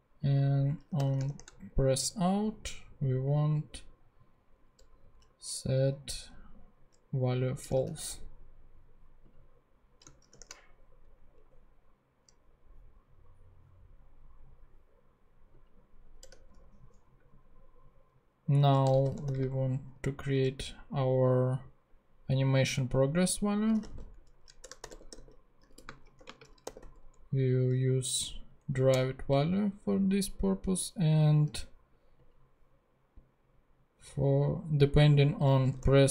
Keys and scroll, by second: 0.6-1.7 typing, 2.0 shift+Return, 7.3-8.4 typing, 10.3 shift+super+p, 16.3 Return, 18.6-19.8 typing, 23.5-27.3 typing, 28.7 Down, 28.9 Return, 35.4-36.1 typing.